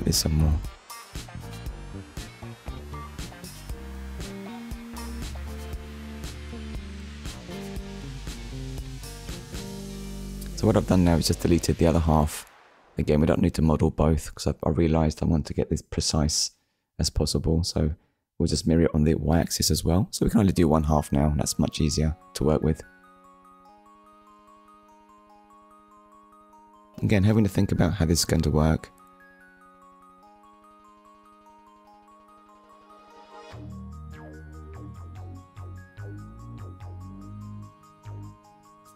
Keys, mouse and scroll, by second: 0.8 KP_7, 1.7 scroll down 1, 3.0 shift+middle click, 5.2 click, 5.9 scroll up 1, 6.5 click, 9.0 Delete, 9.8 click, 11.0 click, 11.4 middle click, 12.3-12.7 scroll down 1, 13.9 Tab, 15.2 click, 16.1 click, 18.3 Tab, 19.1 shift+middle click, 19.5 middle click, 20.6-20.9 scroll up 2, 20.9 shift+middle click, 22.0 click, 22.4 middle click, 27.6 ctrl+r, 30.9 click, 32.2 middle click, 35.2 ctrl+r.